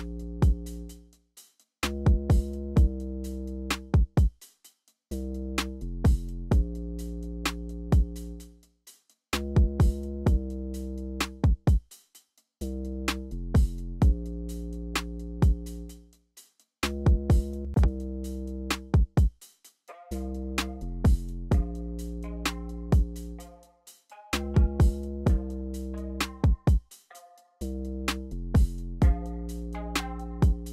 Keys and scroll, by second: 3.7 alt+super+s, 4.1 t, 5.4 t, 6.8 y, 7.9-9.8 typing, 18.7 y.